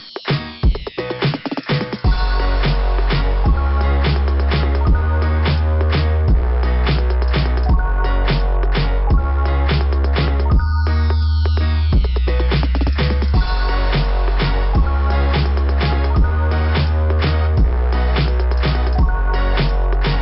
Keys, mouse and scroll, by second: 1.8-2.2 scroll down 2, 2.2 scroll up 2, 2.3 scroll down 2, 2.5 scroll up 2, 2.6 scroll down 2, 2.9 scroll up 1, 3.5 scroll down 1, 5.3 scroll down 1, 6.4 click, 8.7 click, 10.2 click, 12.6 scroll down 2, 16.6 typing, 19.0 scroll down 2.